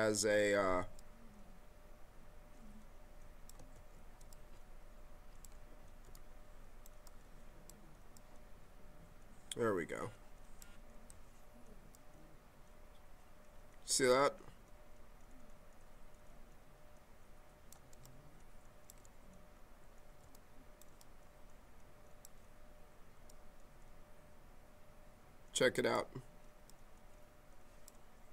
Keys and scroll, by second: 3.7 ctrl+z, 6.0 s, 20.2 s.